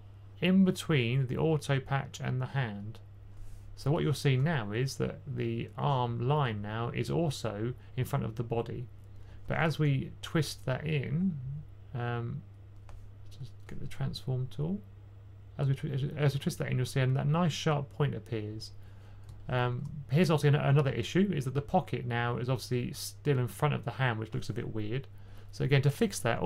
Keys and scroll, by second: 10.0 typing.